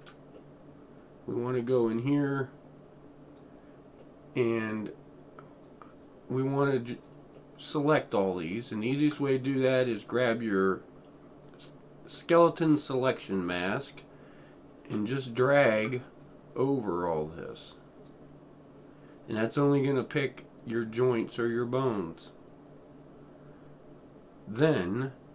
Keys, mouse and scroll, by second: 0.3-0.7 alt+middle drag, 0.9 alt+middle click, 1.3-7.3 alt+right drag, 3.7 alt+right drag, 4.1-4.5 alt+middle drag, 5.9 alt+right click, 6.2-7.3 alt+right drag, 7.4-8.8 alt+middle drag, 9.1 alt+middle click, 13.1-13.8 drag, 15.3-15.9 alt+right drag, 16.6 drag, 17.0-18.5 drag.